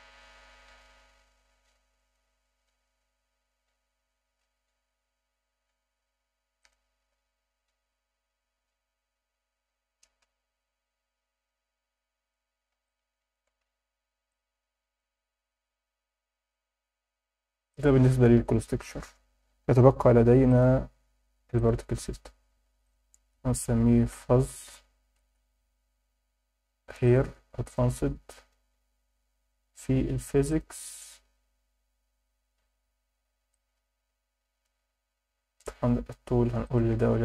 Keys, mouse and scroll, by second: 2.8-3.2 scroll down 5, 4.4-5.0 scroll up 4, 6.6-10.1 drag, 10.9-11.6 scroll down 4, 12.9 alt+shift+middle click, 14.3-15.0 drag, 16.0 scroll down 2, 16.4 scroll up 2, 17.0-17.4 scroll up 3, 20.5 click, 21.5 click, 22.8-25.2 drag, 24.6 z, 27.1 click, 29.8 scroll down 2, 30.5 click, 33.5-34.7 drag, 34.9-35.4 scroll down 3, 35.2 middle click, 36.6 click.